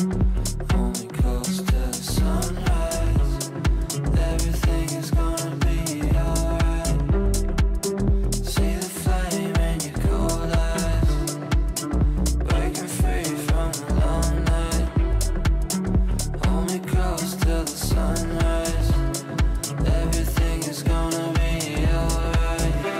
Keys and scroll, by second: 3.3 e, 22.3 g.